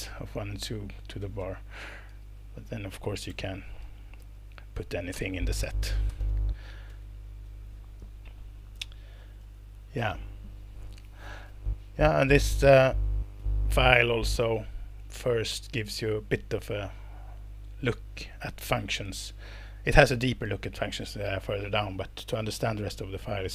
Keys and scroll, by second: 1.2 space, 1.4 space, 2.4 8, 3.3 BackSpace, 4.2 alt+8, 4.9-6.7 typing, 6.9 alt+Return, 8.1 Escape.